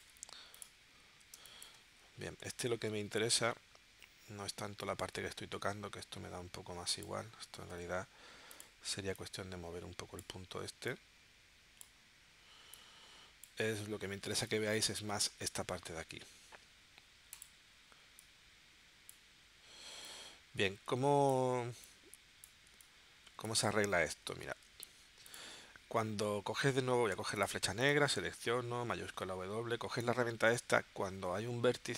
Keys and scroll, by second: 1.3 space, 2.7 shift+w, 7.7 a, 14.3 space, 24.5 shift+w, 27.1 v, 28.9 shift+w.